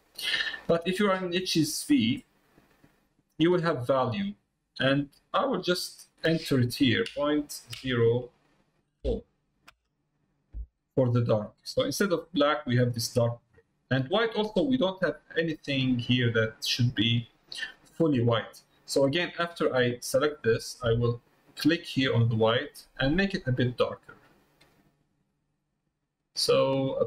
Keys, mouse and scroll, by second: 14.2-18.0 drag, 19.0-20.5 drag, 21.8 click.